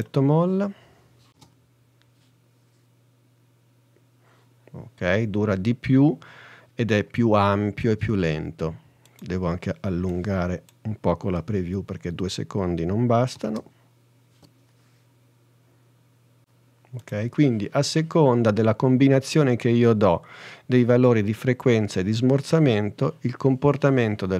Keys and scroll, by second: 1.4 space, 11.5 n, 13.4 space.